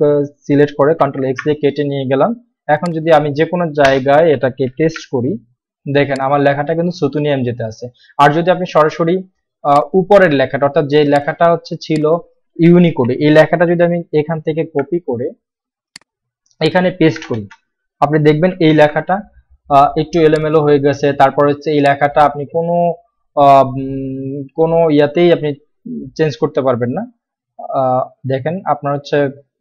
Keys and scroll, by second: 1.0 ctrl+x, 4.0 Return, 4.8 ctrl+v, 12.9 ctrl+a, 14.4 ctrl+x, 17.3 Return, 17.4 Return, 18.6 ctrl+v.